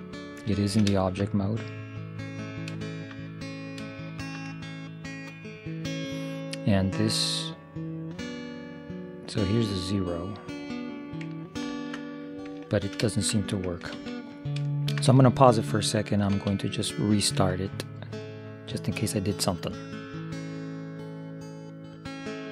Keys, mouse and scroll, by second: 0.2 right click, 0.7 click, 0.7-1.9 right drag, 1.9-4.2 middle drag, 8.3-10.3 drag, 11.8 ctrl+0, 12.7 middle click, 14.1 ctrl+s, 16.4 ctrl+s.